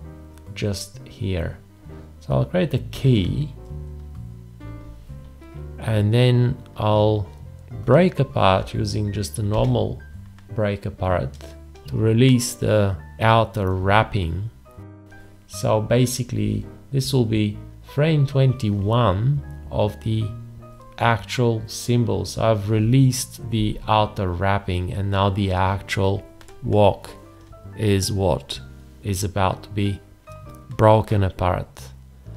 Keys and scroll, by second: 2.9 x, 9.5 ctrl+b.